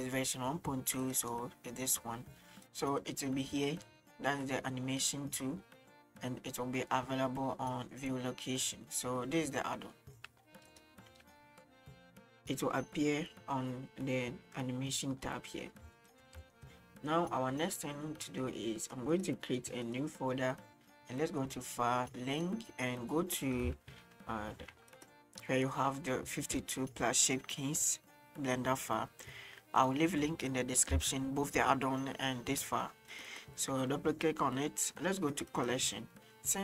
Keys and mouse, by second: 11.1 n, 16.0 shift+middle drag, 16.5 shift+middle click, 16.9 middle click, 18.3 middle click, 19.0-19.3 right drag, 19.7 click, 21.6-22.6 drag.